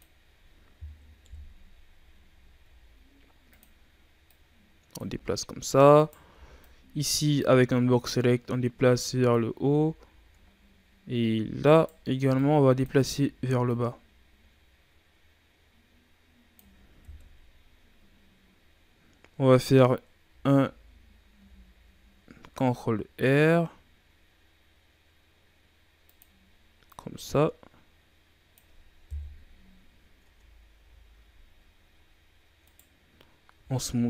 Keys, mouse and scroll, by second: 1.1 KP_1, 2.5 s, 4.2 click, 5.0 z, 5.9 right click, 6.2 b, 8.1-9.5 drag, 9.5 z, 10.1-10.5 shift+scroll down 1, 10.5-11.3 scroll up 1, 11.3 z, 11.7 right click, 12.1 b, 12.9 z, 13.6-16.8 drag, 17.0 KP_3, 20.2 a, 20.4 a, 21.3 r, 26.8-29.0 drag, 29.0 KP_1, 30.2 Tab, 30.3-30.7 scroll down 5, 30.7 a, 31.9-32.5 scroll up 5, 32.5 right click, 33.5 w.